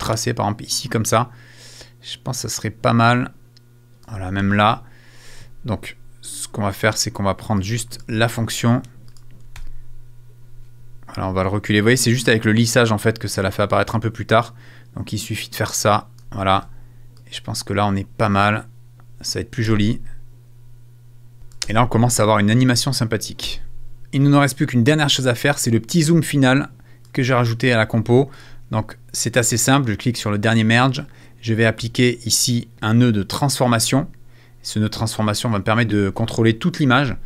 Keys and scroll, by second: 9.6 super+a, 19.6 space, 21.6 space, 23.4 space.